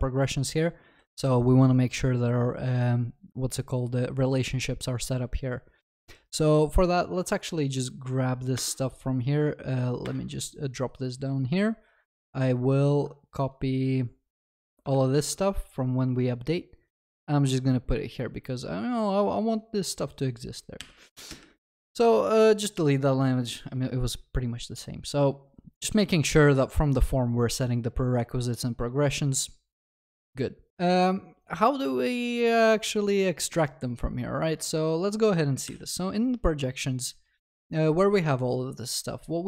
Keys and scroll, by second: 14.9 ctrl+c, 20.8 ctrl+y, 35.7 ctrl+b.